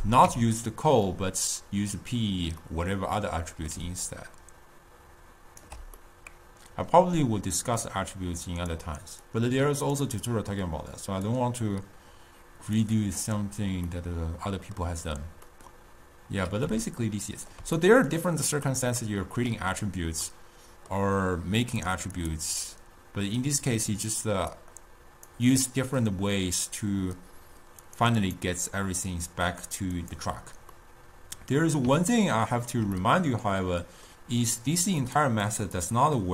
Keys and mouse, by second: 2.9-4.0 middle drag, 4.0 d, 4.3-6.1 right drag, 6.1-8.0 middle drag, 8.0 click, 9.7 click, 11.4 click, 14.2-21.8 middle drag, 21.8 click, 22.4 click, 23.0-24.4 drag, 25.0-28.4 drag, 30.2 click, 30.5 click, 31.4-35.3 middle drag, 35.3 click.